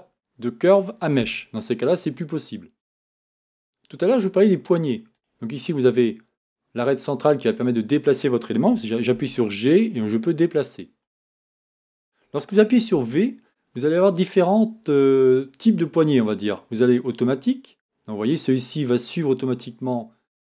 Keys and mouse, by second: 9.1 g, 12.9 v.